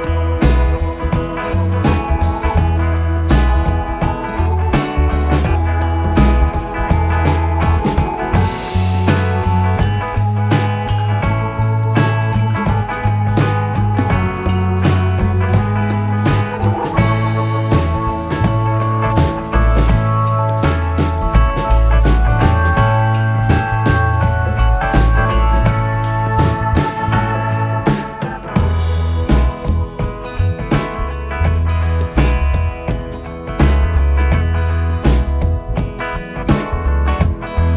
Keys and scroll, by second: 4.6 Up, 5.1 Right, 5.3 Left, 18.9 Right, 24.1 ctrl+-, 24.3 space.